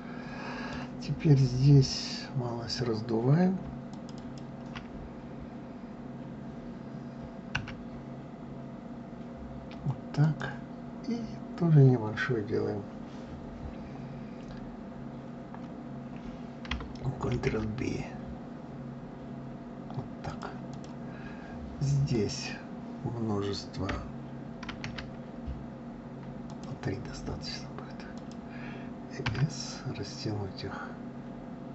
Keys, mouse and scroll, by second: 1.9 click, 3.9 shift+click, 4.2 shift+click, 17.3 ctrl+b, 20.7 click, 22.1 click, 24.7 ctrl+r.